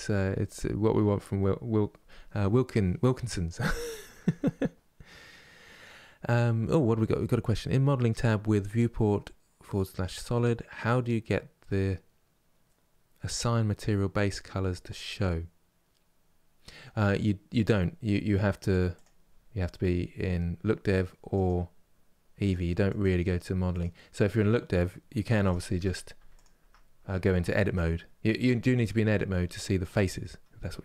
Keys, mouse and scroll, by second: 0.5 scroll up 2, 18.6 click, 19.1-20.2 scroll down 2, 21.1-25.0 drag, 25.0 Tab, 25.8 Tab, 26.0 click, 26.3 Tab, 27.0 shift+middle click, 27.5 scroll up 3, 28.1-30.8 shift+middle drag.